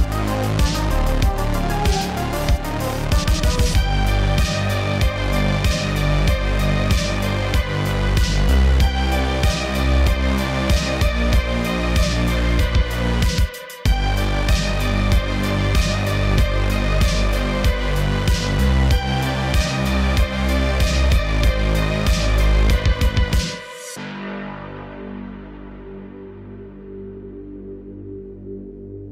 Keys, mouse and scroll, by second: 1.1 middle click, 1.5 scroll up 2, 1.9 click, 2.3 click, 2.5 middle click, 2.8 scroll up 3, 3.1 shift+a, 5.5 click, 6.5-9.3 drag, 9.9 shift+a, 13.3 click, 14.1 middle click, 14.8 shift+d, 15.7 click, 16.7-17.8 drag, 19.0 middle click, 19.2-19.5 scroll up 2, 19.5-27.6 drag, 27.9-29.1 drag.